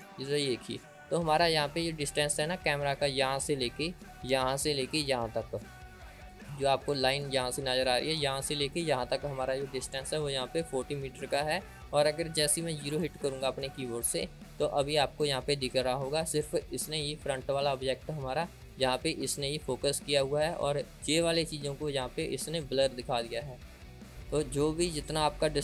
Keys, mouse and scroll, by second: 0.0-1.6 middle drag, 1.6-2.3 scroll down 2, 2.3-3.2 scroll down 3, 4.1-7.1 scroll up 1, 7.1-11.2 drag, 13.5 KP_0, 20.7-24.1 drag.